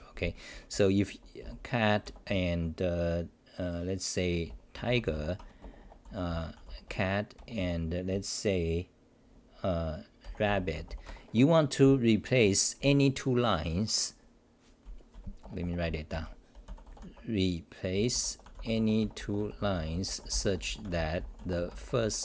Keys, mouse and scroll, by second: 0.5-2.8 typing, 5.4 Home, 5.6 Return, 6.0 Return, 6.0 u, 7.3 BackSpace, 7.6 Return, 11.0 Home, 11.8-13.3 typing, 15.1 c, 15.4 Return, 15.8 Return, 15.8 c, 16.1 u.